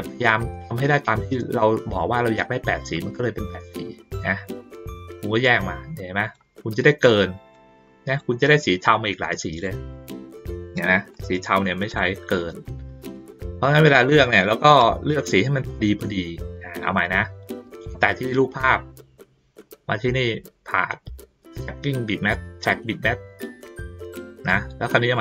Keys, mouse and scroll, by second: 0.4-1.9 drag, 2.9-3.4 drag, 4.1-4.7 drag, 5.4-6.3 drag, 7.5-8.2 drag, 8.8-9.6 drag, 10.6 click, 11.1 click, 11.9 click, 12.5 ctrl+middle click, 13.1 click, 15.7 ctrl+middle click, 15.8-16.7 ctrl+scroll down 2, 16.9-17.3 ctrl+scroll up 1, 17.3 ctrl+scroll down 1, 17.8 click, 19.9 click, 22.3 click, 23.7-24.4 drag.